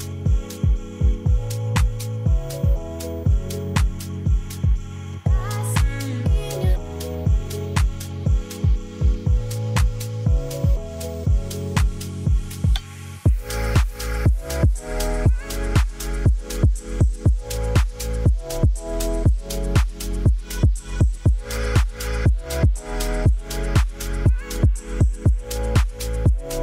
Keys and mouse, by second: 3.9 space, 4.7-6.3 middle drag, 6.7-7.6 middle drag, 7.9 space, 8.2-12.1 drag, 12.3-12.9 middle drag, 13.3 middle drag, 14.1-15.7 drag, 15.8-18.7 middle drag, 18.9-19.4 middle drag, 19.6-22.0 middle drag, 22.0-22.5 drag, 22.8 shift+drag, 23.7 ctrl+s, 24.1 click, 25.3 click, 25.8-26.6 middle drag.